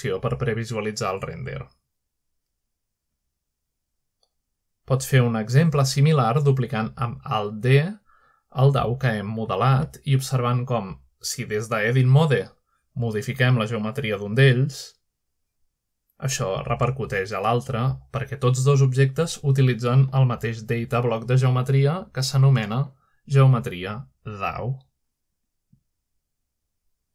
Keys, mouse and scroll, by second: 4.4 click, 5.4 z, 5.8 click, 6.7 click, 7.0 z, 8.0-8.9 drag, 9.8-10.3 scroll up 1, 10.3-12.2 middle drag, 11.7-12.9 shift+scroll up 1, 13.7 z, 14.5-15.8 drag, 16.6-17.7 drag, 17.3 shift+middle click, 19.8-23.6 drag, 20.6 g, 23.9 click, 25.2 middle click.